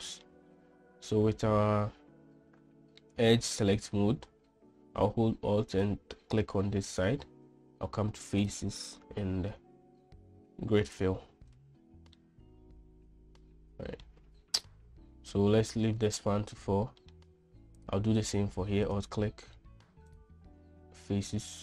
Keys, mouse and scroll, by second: 0.5 middle click, 6.2 alt+click, 9.0-11.6 drag, 12.6-14.4 middle drag, 17.4 middle click, 18.2 click, 20.5-21.6 drag.